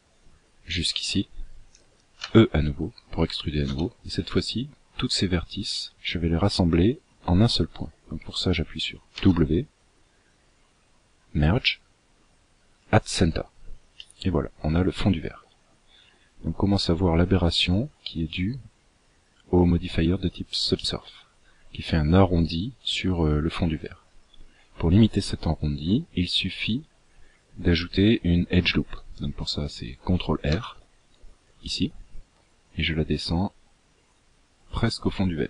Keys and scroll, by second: 1.9 e, 8.8 w, 30.1 ctrl+r.